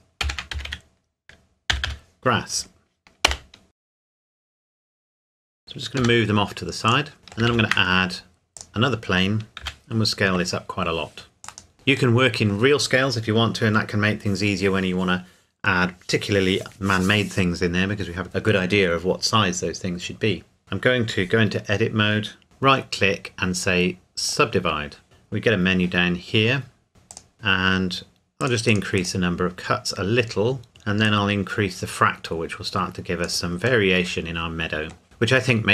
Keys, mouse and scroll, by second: 0.2-1.8 typing, 3.3 Return, 3.6 click, 3.9 Return, 4.1 click, 4.2-6.0 typing, 4.6 Return, 4.8 click, 5.4 shift+click, 5.6-6.0 scroll down 1, 6.9 click, 7.2 middle click, 7.5 shift+a, 8.6 click, 9.6 s, 11.4 click, 11.7-12.2 scroll down 1, 12.2 middle click, 20.6 Tab, 22.4 right click, 24.3 click, 26.9 click, 31.0 click, 33.8 middle click.